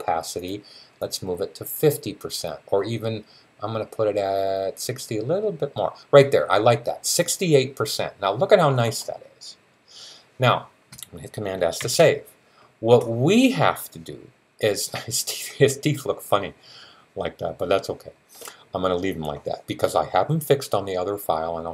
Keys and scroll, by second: 11.6 super+s.